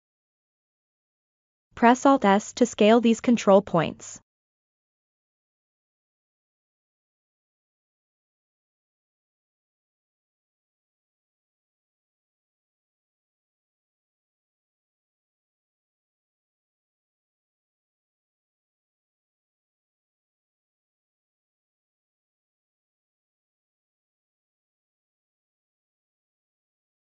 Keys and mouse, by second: 1.1 alt+s, 4.2-5.6 middle drag, 5.8 ctrl+middle click, 6.2 middle click, 9.6 alt+s, 11.5 middle click, 13.4 g, 15.8 middle click, 17.4 middle click, 19.7-21.1 middle drag, 21.4 shift+click, 22.0 shift+click, 22.9-24.0 middle drag, 25.2 middle click, 26.6 middle click.